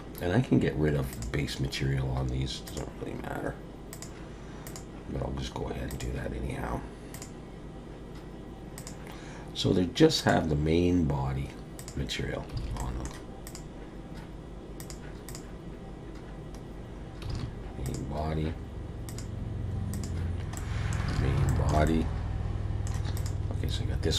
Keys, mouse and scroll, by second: 1.1 click, 2.6 click, 3.9 click, 4.6 click, 5.9 click, 7.1 click, 8.8 click, 10.2 click, 11.8 click, 12.6 alt+a, 12.8 middle click, 13.4 click, 14.8 click, 15.3 click, 16.7-17.2 scroll down 1, 17.3 alt+a, 17.8 click, 19.1 click, 19.9 click, 20.5 middle click, 21.1 alt+a, 21.5 shift+middle click, 21.8 middle click, 23.1 click.